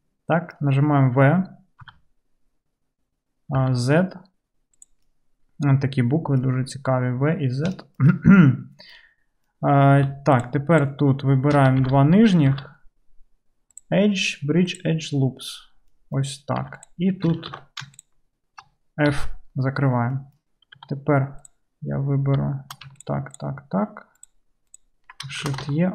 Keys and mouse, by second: 1.9 v, 7.8 shift+click, 8.0 shift+middle click, 8.6-10.1 right drag, 10.1 shift+click, 10.4 shift+middle click, 10.5 shift+click, 10.9 shift+middle click, 10.9-13.8 shift+drag, 11.8 alt+z, 12.5 alt+z, 13.8-16.9 middle drag, 16.7 2, 16.9-21.4 drag, 17.5 alt+z, 19.1 f, 20.8 2, 21.4 middle click, 21.6-23.0 drag, 23.0 ctrl+middle click, 23.4-25.9 ctrl+drag, 23.4 typing, 25.5 shift+e.